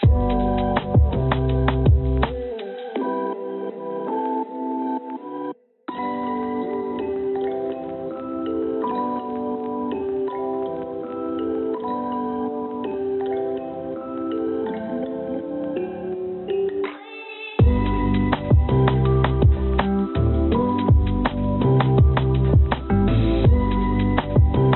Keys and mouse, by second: 2.9 ctrl+z, 3.1 ctrl+z, 3.3 ctrl+z, 4.0 ctrl+z, 5.9 ctrl+r, 11.9 3, 12.2 click, 12.9 e, 23.0-24.1 drag.